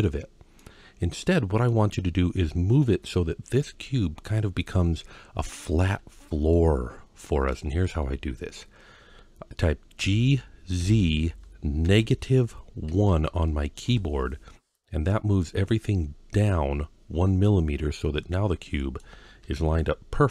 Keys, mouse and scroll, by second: 0.4-1.5 middle drag, 6.0-6.3 scroll down 1, 6.3-7.3 middle drag, 7.6-9.0 scroll up 2, 9.8 g, 10.6 z, 11.7 KP_Subtract, 12.7 KP_1, 13.7 KP_Enter, 14.9-15.6 middle drag, 17.3-18.8 middle drag, 19.2 KP_1.